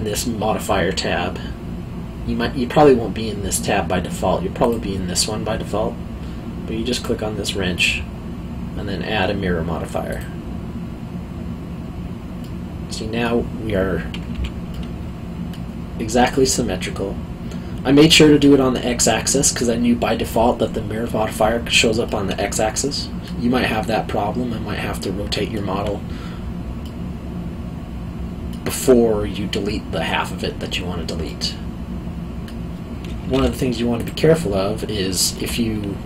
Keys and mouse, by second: 4.6 click, 6.9 click, 10.1 click, 12.4 middle click, 14.3 q, 14.7 middle click, 22.0 middle click, 24.9 alt+middle click, 31.2 middle click, 33.4 3, 34.0 click.